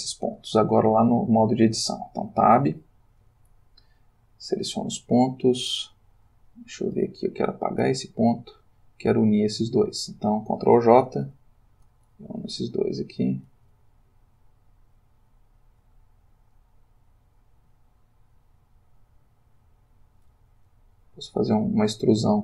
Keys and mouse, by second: 1.3 shift+middle click, 2.8 Tab, 5.7 click, 7.8 x, 8.1-8.7 drag, 9.1 click, 9.8 space, 9.9 shift+click, 11.1 ctrl+j, 12.5 click, 13.6 x, 14.6 click, 15.3 click, 15.8 ^, 15.9 x, 16.6 click, 17.4 click, 17.6 g, 20.2 click, 20.4 e, 21.4 click, 21.7 e.